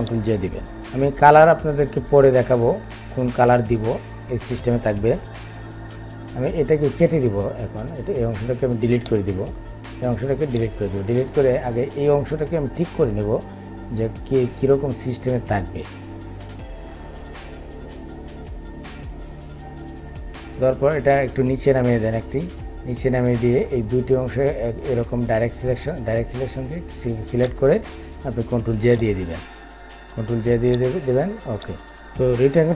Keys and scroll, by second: 28.3 ctrl+j.